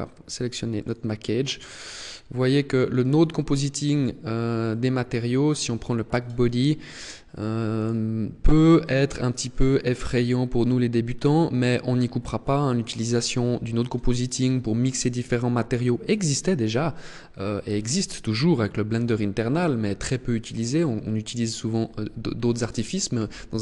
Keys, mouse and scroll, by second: 0.7 click, 1.9 click, 2.9 click, 5.5 click, 7.7 click.